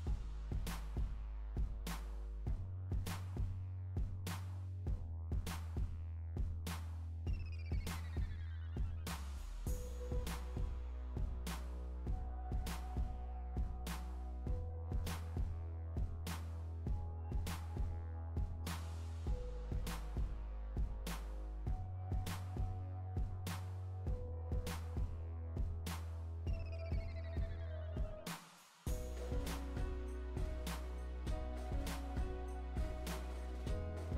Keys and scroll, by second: 20.3 Delete.